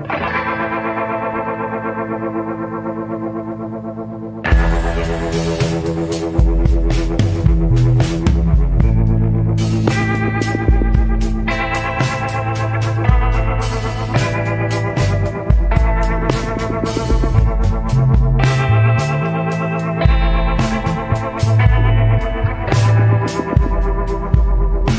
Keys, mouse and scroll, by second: 0.9 scroll down 1, 5.5 scroll down 1, 10.9 scroll up 1, 11.7 scroll down 1, 14.1 scroll up 1, 17.1 scroll up 1, 20.6 scroll down 1.